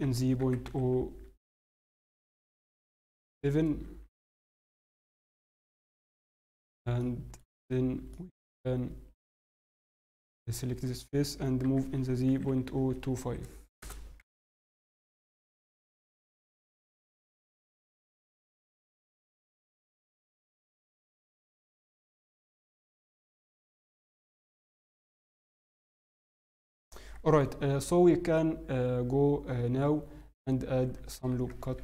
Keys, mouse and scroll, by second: 5.6 shift+middle click, 6.0 middle click, 7.1 shift+middle click, 8.1 shift+middle click, 8.5 scroll, 9.2 click, 9.2-9.7 scroll up 1, 11.3 click, 11.3 g, 16.0 middle click, 19.8 shift+middle click, 20.6 g, 22.5-22.8 scroll down 4, 22.8 middle click, 25.6 scroll up 1, 26.2 shift+middle click, 26.2 scroll up 4.